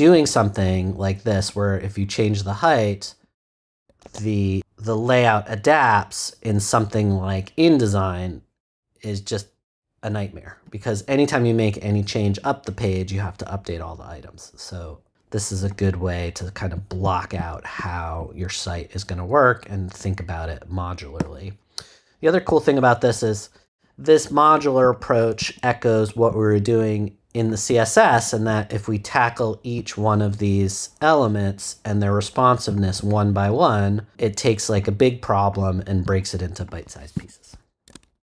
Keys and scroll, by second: 4.0 super+z.